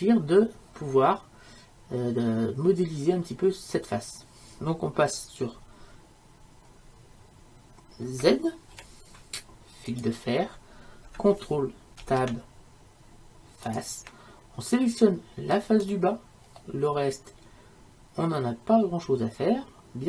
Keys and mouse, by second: 0.4-8.8 middle drag, 8.8 z, 12.1 ctrl+Tab, 15.6-16.7 right drag, 16.7-19.4 middle drag.